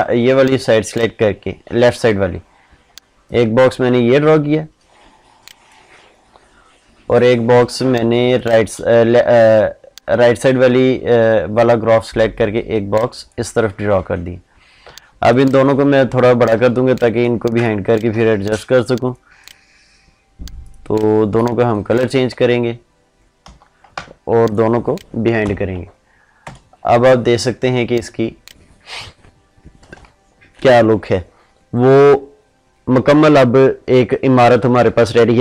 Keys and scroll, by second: 25.2 ctrl+shift+[, 26.2 ctrl+0.